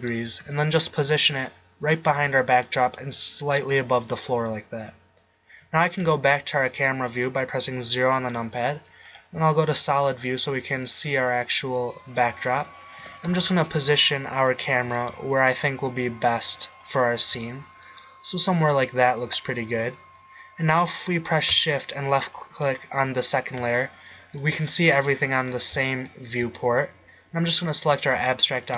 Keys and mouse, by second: 0.7 g, 6.3 KP_0, 13.2 g, 15.0 g, 17.3 g, 22.6 click.